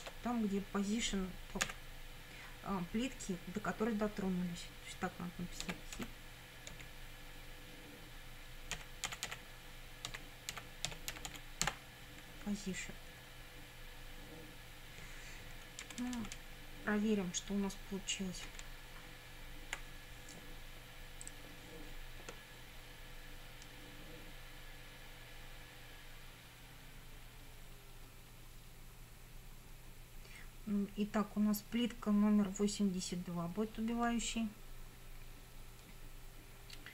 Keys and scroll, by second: 0.0 Tab, 1.7 =, 5.6 h, 6.0 i, 6.8 t, 8.5-12.2 typing, 15.8 Down, 18.6 Up.